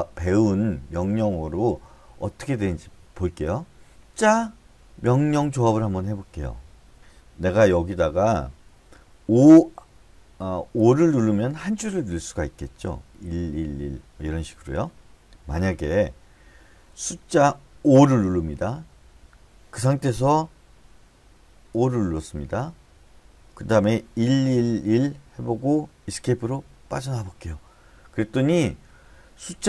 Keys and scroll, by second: 2.0 Escape, 11.2 o, 13.7 1, 14.0 1, 14.2 1, 14.6 Escape, 18.4 5, 22.1 o, 24.6 1, 24.9 1, 25.3 1, 27.2 Escape.